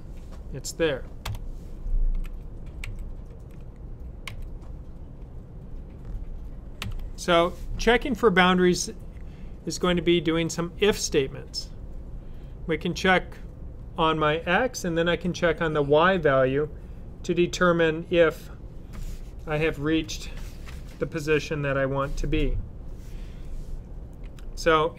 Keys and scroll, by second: 2.7 typing, 6.4-7.2 typing.